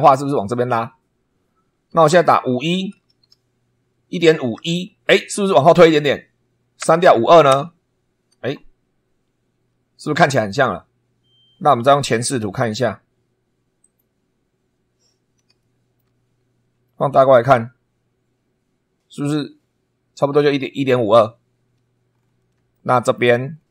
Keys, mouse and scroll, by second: 2.0 BackSpace, 2.9 5, 4.5 1, 6.8 BackSpace, 7.4 2, 13.8 click, 14.7 scroll up 2, 15.6 shift+middle click, 16.3 shift+scroll up 2, 16.8 shift+middle click, 17.3 shift+scroll up 1, 22.1-22.4 scroll down 1, 22.7 shift+middle click, 23.4-23.7 shift+scroll down 3.